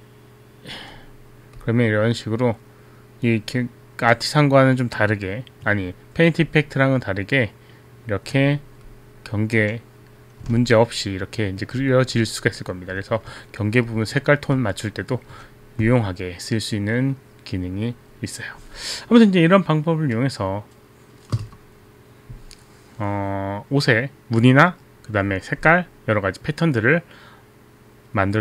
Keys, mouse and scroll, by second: 1.7 click, 5.7 b, 6.7 click, 9.0 click, 11.2 alt+click, 12.2 click, 13.3 alt+click, 14.1 alt+click, 14.2 alt+click, 14.6 alt+click.